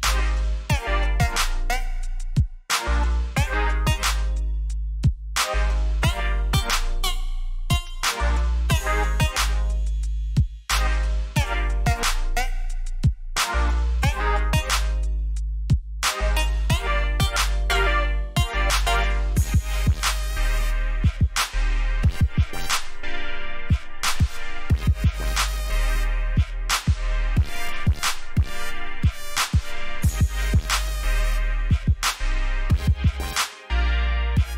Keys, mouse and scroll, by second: 3.7 click, 6.0 ctrl+a, 6.8 click, 9.5 alt+scroll down 1, 10.0-11.5 scroll down 1, 11.5 click, 12.4 ctrl+j, 13.2-14.5 scroll down 1, 15.2 click, 21.1 scroll up 1, 22.3 click, 24.3 click, 27.3 click.